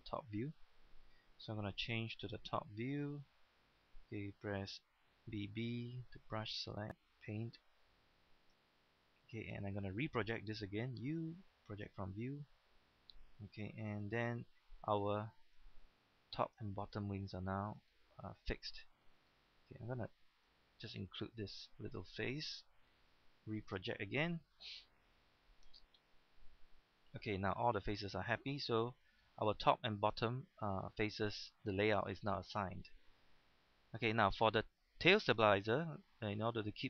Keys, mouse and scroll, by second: 0.4 scroll down 1, 0.8 shift+middle click, 3.0 KP_7, 5.2 typing, 5.8-8.8 drag, 9.4 right click, 10.9 typing, 11.6 click, 13.8 typing, 14.9 click, 15.2-15.5 scroll up 1, 16.1 shift+middle click, 16.6 scroll up 1, 17.5 scroll up 1, 18.6 shift+scroll up 1, 19.0 scroll down 1, 19.7-20.3 scroll down 1, 20.3 shift+right click, 21.4 scroll down 1, 22.0 shift+middle click, 22.9 u, 23.6 click, 24.8-26.2 scroll down 1, 27.0 g, 27.7 click, 28.0-28.4 scroll down 1, 29.0 scroll up 1, 29.2 shift+middle click, 32.6 shift+middle click, 33.3 scroll up 1, 33.9 shift+middle click, 34.0-35.0 scroll up 1, 35.5 shift+middle click.